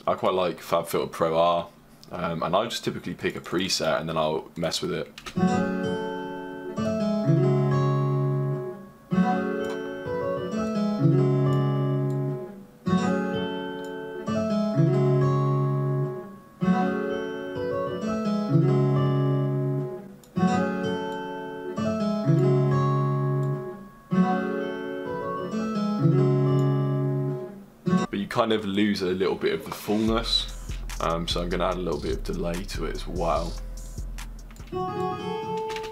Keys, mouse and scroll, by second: 0.3 click, 27.5 click, 28.0-30.5 drag, 30.7 click, 31.4 right click, 34.8 click.